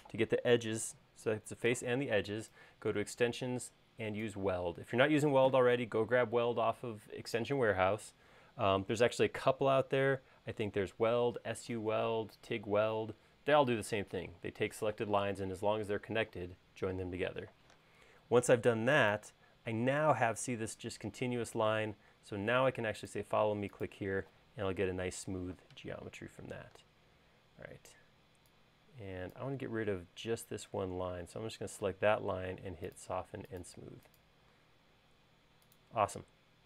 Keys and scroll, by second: 26.8 space.